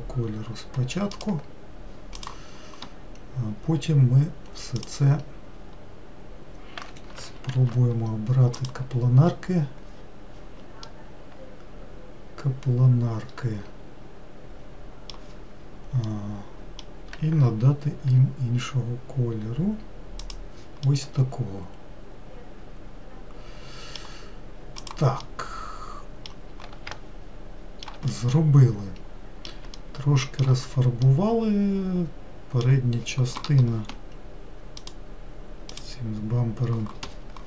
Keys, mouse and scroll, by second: 2.8 click, 4.3-5.4 scroll up 1, 5.4 click, 9.3 shift+g, 11.4-14.4 middle drag, 18.7 g, 21.4-25.4 middle drag, 25.4 click, 25.8-27.0 middle drag, 27.0-27.5 scroll down 1, 27.5-37.4 shift+middle drag.